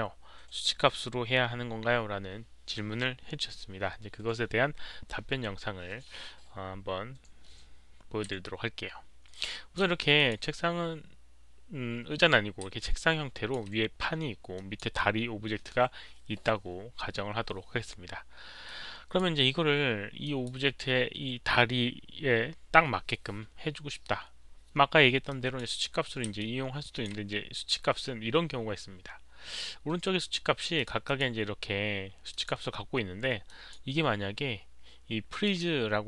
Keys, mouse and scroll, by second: 8.4-9.7 alt+drag, 10.1 click, 12.8-13.5 alt+drag, 14.5 alt+click, 18.6 alt+click, 20.2 alt+click, 25.3 click, 26.4-27.0 alt+drag, 29.4 alt+click, 30.7 alt+click, 31.0 alt+drag, 32.3 alt+drag, 33.4 alt+click, 35.4 alt+click.